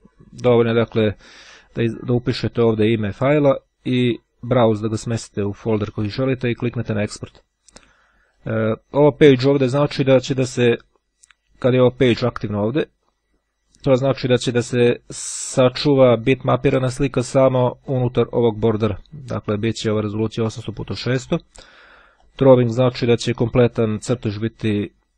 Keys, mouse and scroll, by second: 2.1 click, 8.3 click, 12.5 click, 22.2 click.